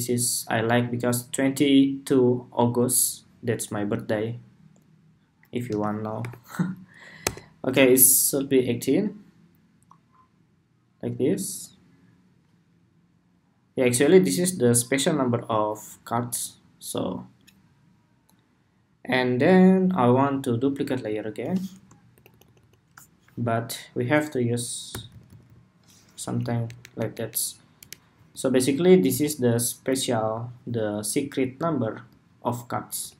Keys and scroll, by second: 20.3 super+d, 26.0 Escape, 28.8 alt+Left, 32.7 alt+Left.